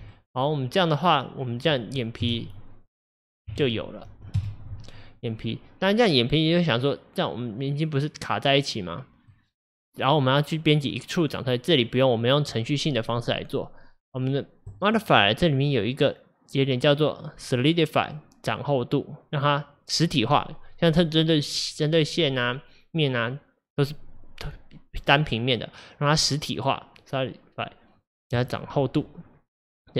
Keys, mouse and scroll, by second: 0.2-2.3 middle drag, 2.3 KP_Divide, 3.4 middle click, 3.6 Tab, 4.4 KP_Divide, 5.2-8.3 middle drag, 14.8-17.8 drag.